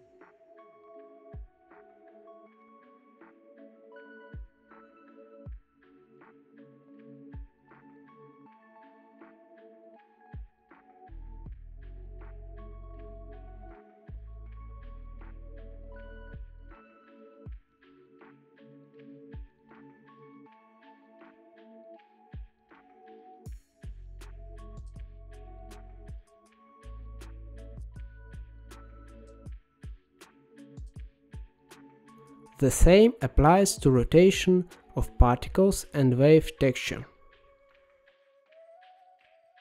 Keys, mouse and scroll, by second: 0.6-1.1 scroll down 4, 1.1 middle click, 1.8-2.5 scroll down 3, 2.5-3.4 scroll down 1, 3.4 g, 4.3-5.3 middle drag, 5.3 click, 5.8 g, 6.6 middle click, 7.0-7.5 scroll up 10, 7.5 middle click, 8.3-10.3 drag, 10.3 shift+a, 13.1-14.8 drag, 15.5-17.6 drag, 17.6-18.0 scroll up 3, 18.0 middle click, 18.4-18.9 scroll up 1, 18.9-20.9 drag, 22.3-27.2 drag, 27.5-28.3 scroll down 7, 28.3-30.5 middle drag, 30.5-31.0 scroll up 4, 31.0-32.2 middle drag, 32.2 shift+a, 38.9-39.6 drag.